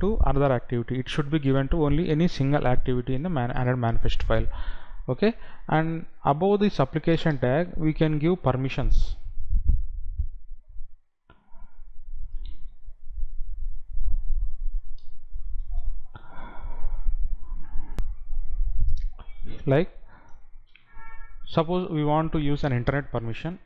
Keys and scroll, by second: 18.1 F9.